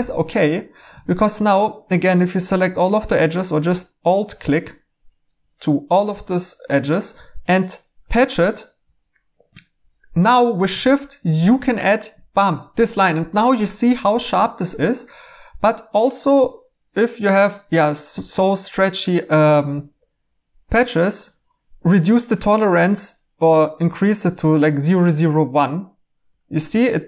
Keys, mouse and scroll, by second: 0.8 2, 23.9 1.